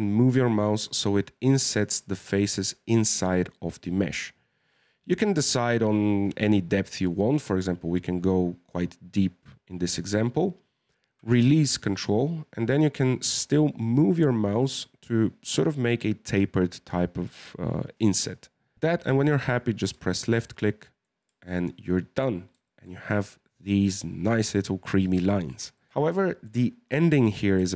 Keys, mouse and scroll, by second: 19.6-20.1 scroll down 4, 20.1-21.2 shift+middle drag, 21.2 Tab, 21.5-22.4 middle drag, 22.4 scroll down 2, 22.6-23.3 shift+middle drag, 23.3-24.2 scroll up 4, 25.2-25.9 shift+middle drag, 25.9 scroll up 2, 26.2-26.9 shift+middle drag, 26.9 Tab, 27.6-27.7 shift+middle drag.